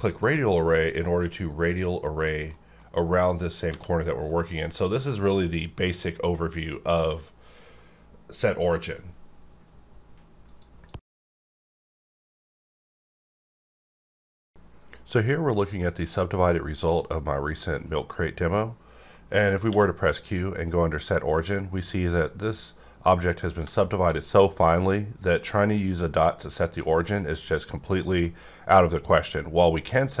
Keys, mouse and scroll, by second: 0.0 shift+click, 0.1 shift+click, 0.6 scroll down 1, 1.7-2.2 scroll up 1, 2.2 click, 2.8 middle click, 3.7 1, 4.3 middle click, 19.7 q, 21.0 click, 21.0 click, 22.0-23.2 scroll up 1, 23.8 shift+middle click, 24.1-24.6 shift+scroll up 2.